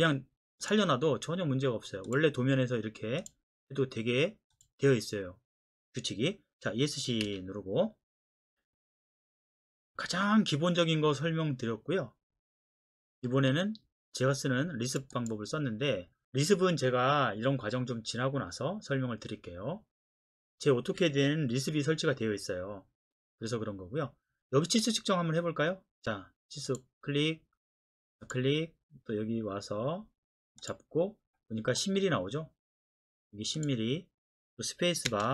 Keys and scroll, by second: 7.3 Escape, 35.1 space.